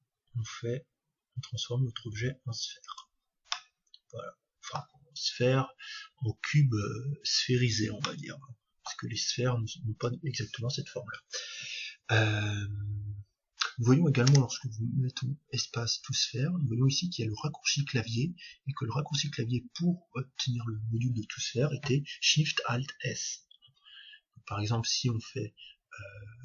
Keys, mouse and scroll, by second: 3.0-4.8 drag, 3.5-5.5 middle drag, 8.1-10.0 middle drag, 14.2 space.